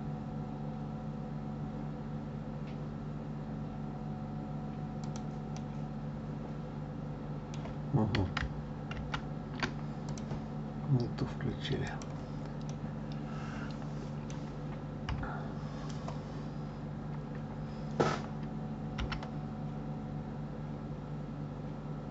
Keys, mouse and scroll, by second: 5.5-8.5 middle drag, 8.9 ctrl+z, 10.0 click, 11.9 click, 12.7-15.0 middle drag, 15.0 KP_3.